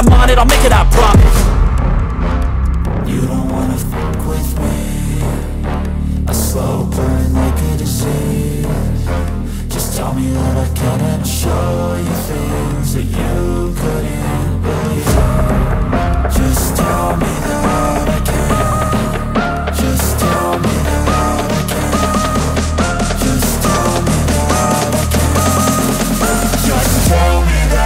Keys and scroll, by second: 7.1 ctrl+-, 7.3 ctrl+-, 7.8 ctrl+-, 8.2 ctrl+-, 10.5 ctrl+0.